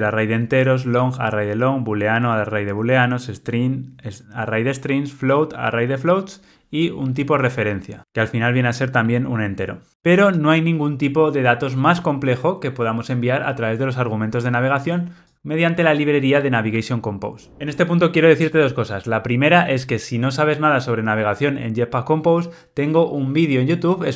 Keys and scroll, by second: 9.9 alt+super+[, 12.8 alt+super+[.